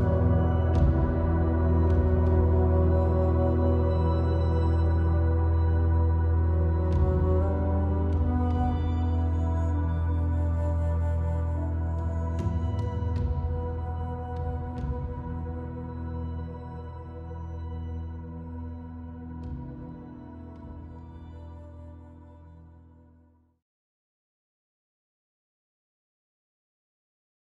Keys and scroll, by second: 6.5 super+e.